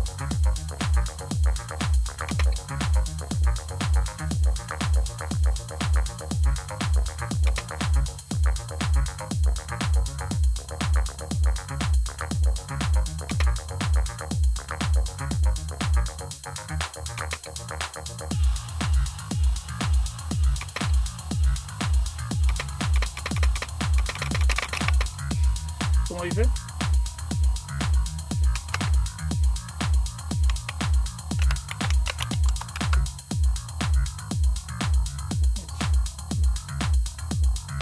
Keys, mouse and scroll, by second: 2.2 space, 7.3 Tab, 7.5 space, 13.2 space, 17.1 space, 20.5 Tab, 22.4-24.6 typing, 28.4 q, 30.1-32.6 typing, 32.6 Return.